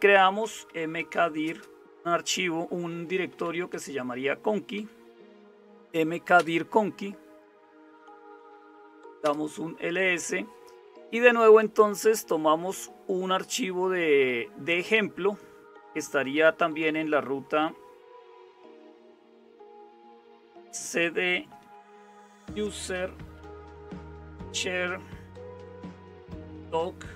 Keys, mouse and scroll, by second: 0.0-27.1 typing.